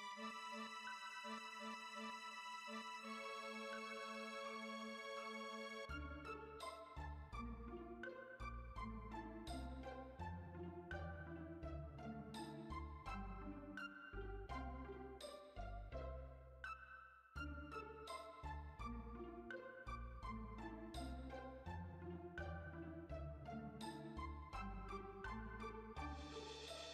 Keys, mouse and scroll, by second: 3.4 click, 3.7 click, 4.0 click, 5.2 click, 5.6 middle click, 5.8 space, 6.2 space, 6.6 click, 6.9 click, 9.1-10.5 drag, 10.5 z, 10.8 space, 11.6-12.3 shift+middle drag, 12.3 click, 12.6 h, 13.1 z, 13.4 middle drag, 13.6 scroll up 1, 15.7-17.9 middle drag, 17.9 scroll up 3, 19.4 scroll down 1, 19.4-21.1 middle drag, 21.1-21.4 scroll down 1, 21.4-26.9 middle drag.